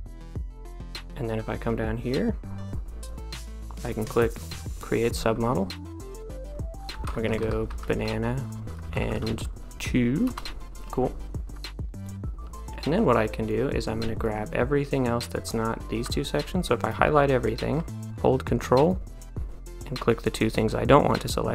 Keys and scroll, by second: 6.9-9.8 typing, 10.3 Return.